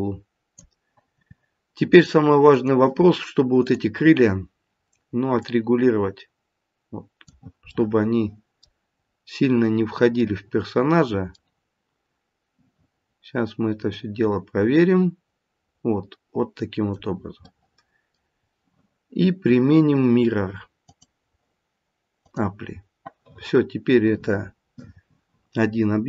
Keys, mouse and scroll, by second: 1.8 click, 3.6 click, 5.4 click, 7.9 middle click, 8.4 middle click, 9.0-10.6 scroll up 2, 10.6 middle click, 10.9 middle click, 11.6 middle click, 13.9 click, 17.5 middle click, 18.3-20.5 scroll down 2, 20.5-20.8 scroll down 1, 20.8 click.